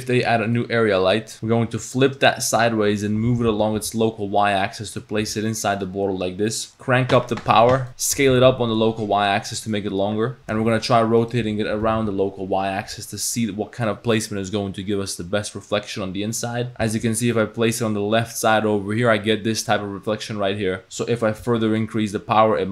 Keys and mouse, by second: 0.7 middle drag, 1.3-2.0 middle drag, 1.8 r, 3.4 g, 5.2 r, 6.7 r, 6.8 click, 6.9 middle click, 7.4 click, 7.8 middle click, 8.2 s, 10.4 r, 11.9 r, 17.1 g, 20.8 click.